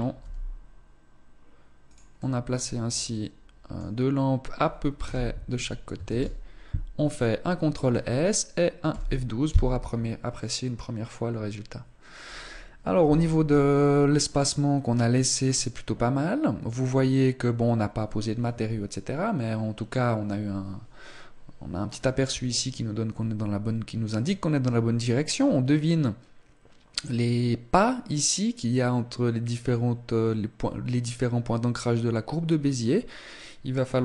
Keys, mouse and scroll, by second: 0.0 g, 1.9 middle click, 4.8 KP_0, 7.0 ctrl+s.